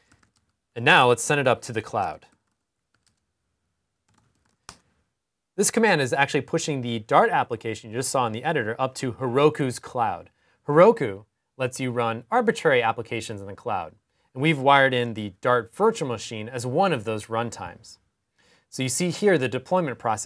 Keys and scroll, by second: 0.0-0.9 typing, 2.0-2.7 typing, 3.8-4.4 typing.